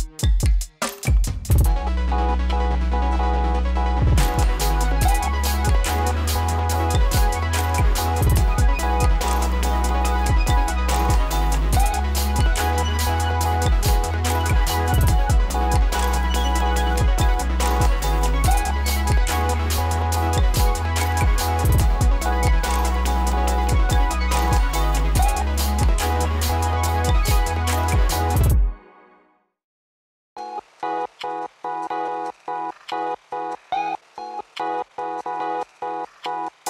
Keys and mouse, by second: 1.0 space, 1.7 click, 2.1 space, 7.1 space, 7.5 click, 8.1 space, 10.8 space, 14.6 click, 15.1 space, 18.2 space, 19.7 click, 20.4 ctrl+d, 21.0-26.4 drag, 26.4 space, 28.7-30.5 drag, 30.5 space, 36.1 space.